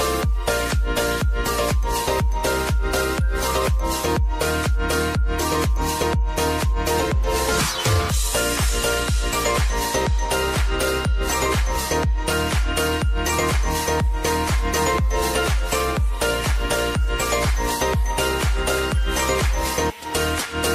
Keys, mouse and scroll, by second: 0.2-1.7 typing, 2.1-3.8 drag, 3.8 F9, 4.5-7.0 drag, 7.0 typing, 8.6-10.1 drag, 10.1 space, 11.9 click, 12.8 space, 14.3 click, 14.6 space, 16.1-17.5 drag, 17.8 space, 20.5 click.